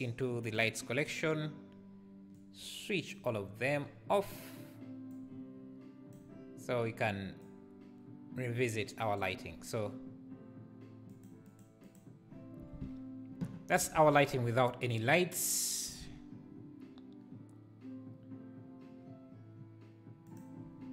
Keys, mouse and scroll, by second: 0.6 m, 2.4-11.3 drag, 11.5 click, 11.8 click, 20.4 click.